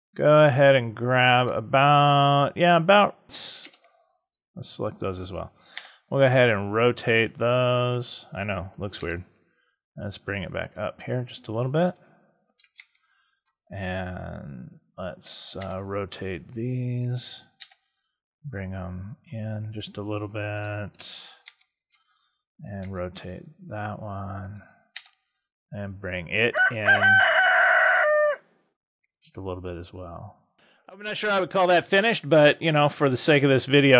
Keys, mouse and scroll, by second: 3.6 b, 5.7 r, 8.9 g, 10.7 click, 12.7 ctrl+KP_Subtract, 15.5 r, 17.5 g, 19.7 click, 21.4 ctrl+KP_Subtract, 22.8 r, 24.4 click, 24.8 g, 29.0 click.